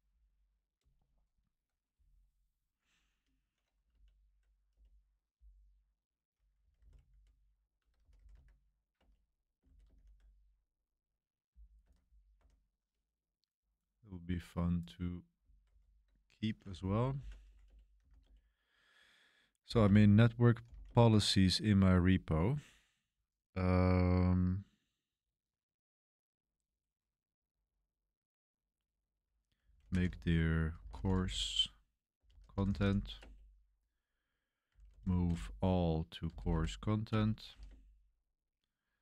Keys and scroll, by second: 3.9 Page_Up, 4.7 Return, 6.3-9.9 typing, 8.9 Return, 11.8 Escape, 12.3 Escape, 15.7 super+3, 16.9-18.6 typing, 19.7-20.8 typing, 29.3-33.3 typing, 34.4-38.0 typing, 37.0 Return.